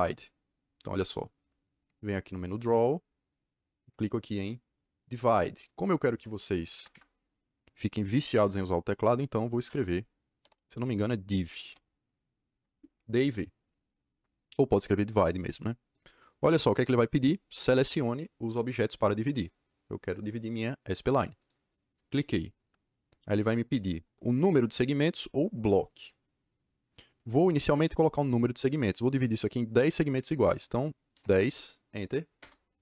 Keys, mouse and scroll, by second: 2.5 click, 6.7 Escape, 6.8 Escape, 8.2 Escape, 8.3 Escape, 10.1-11.6 typing, 12.4 Return, 21.3 click, 31.1 KP_1, 31.2 KP_0, 32.3 KP_Enter.